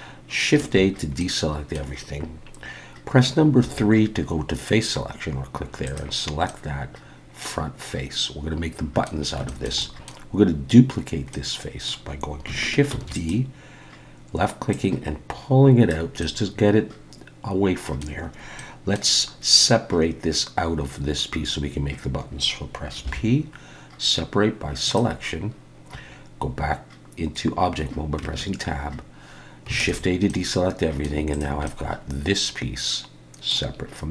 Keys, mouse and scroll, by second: 0.6 alt+a, 1.2 middle click, 3.6 3, 5.8 click, 6.5 middle click, 9.5 shift+middle click, 11.3 middle click, 12.9 shift+d, 14.7 click, 16.2 middle click, 18.6 middle click, 23.0 p, 28.2 Tab, 29.8 alt+a, 30.3 middle click, 31.3 click, 31.6 middle click.